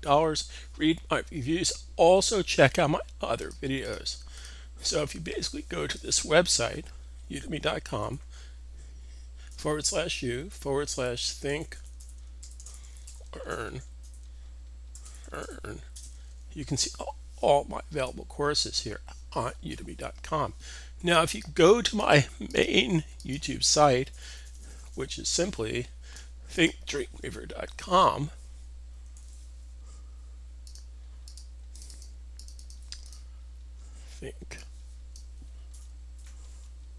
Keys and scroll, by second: 7.9 u, 9.4 /, 10.7-15.2 typing, 29.0 super+w.